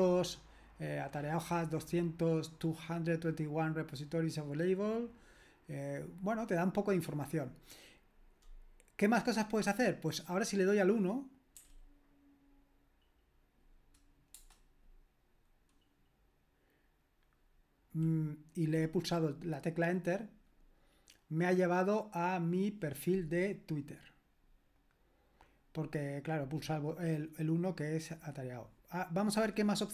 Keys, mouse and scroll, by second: 14.3 Return, 29.2 click.